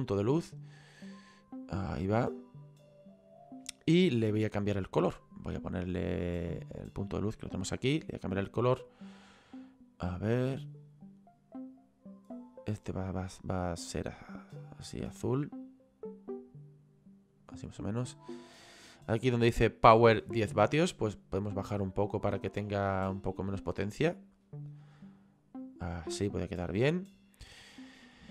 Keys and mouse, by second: 7.1 click, 18.6 click, 20.9 click.